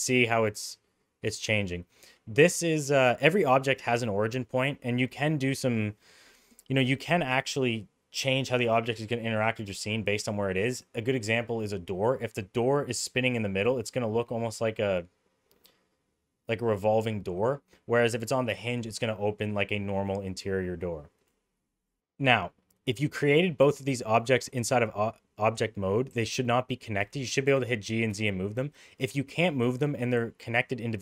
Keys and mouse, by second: 2.4-2.8 middle drag, 3.0 middle drag, 4.2-4.5 middle drag, 21.8 middle click, 23.1 middle click, 26.1 g, 27.3 click, 27.5 g, 29.7 click.